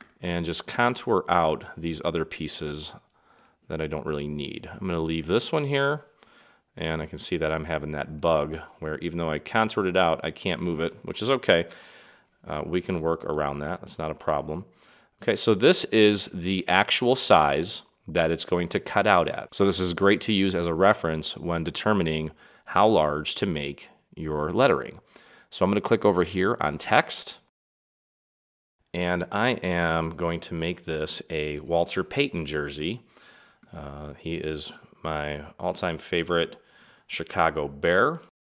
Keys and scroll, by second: 11.6 super+=, 12.8 space, 29.6-33.0 typing.